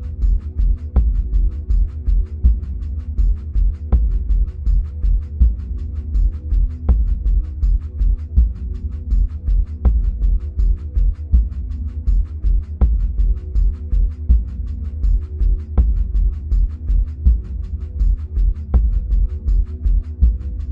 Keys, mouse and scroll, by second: 1.7-11.3 drag, 11.3-18.8 middle drag, 12.2-14.4 scroll down 2, 14.4-17.9 scroll up 2, 20.0 middle click, 20.4 middle click.